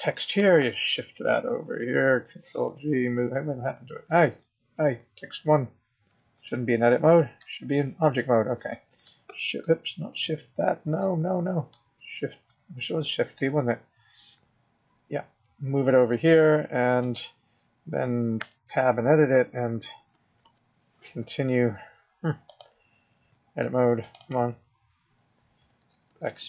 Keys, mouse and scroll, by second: 0.1 click, 0.5 shift+d, 2.5 g, 7.4 Tab, 9.3 shift+d, 14.3 g, 18.4 Tab, 19.7 BackSpace, 20.1 BackSpace, 20.4 BackSpace, 22.4 click, 24.0 click, 24.2 click, 25.7 BackSpace, 25.9-26.4 BackSpace.